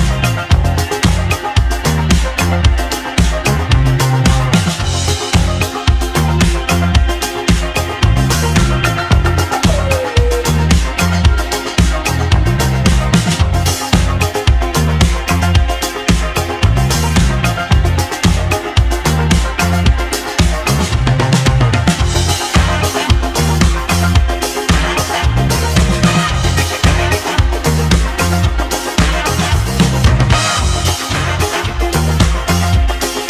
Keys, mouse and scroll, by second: 0.9 g, 4.6 g, 7.7 s, 9.8 g, 17.2 click, 18.7-20.1 drag, 20.1 Tab, 20.8 a, 21.7-26.6 drag, 27.0 Tab, 30.1 click, 30.9-31.3 scroll down 2, 32.9 scroll up 1, 33.0-33.2 middle drag.